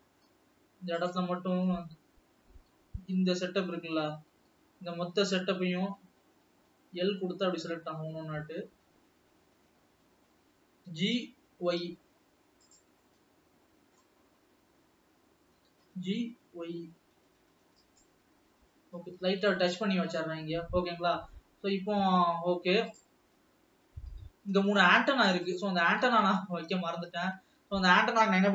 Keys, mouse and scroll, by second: 0.1-1.2 scroll up 6, 1.2 click, 1.6 Tab, 2.1 alt+a, 2.9-3.5 l, 3.8 l, 4.1-4.7 l, 5.1-5.7 l, 6.2-6.6 scroll up 2, 7.3 l, 7.9 l, 8.0 l, 9.4 l, 9.7 l, 11.1 g, 13.2-14.7 middle drag, 14.7 scroll up 2, 15.9 g, 19.0-19.4 scroll down 5, 19.9 alt+middle click, 20.8-21.4 scroll down 4, 21.5-23.5 middle drag, 26.6-27.7 scroll up 3, 27.9 alt+a.